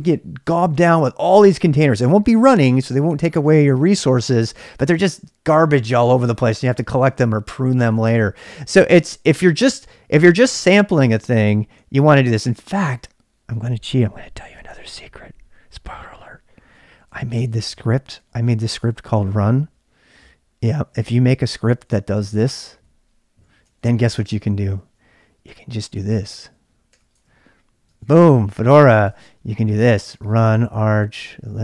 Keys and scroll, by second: 12.0 ctrl+c, 16.8-19.0 typing, 21.8-31.6 typing.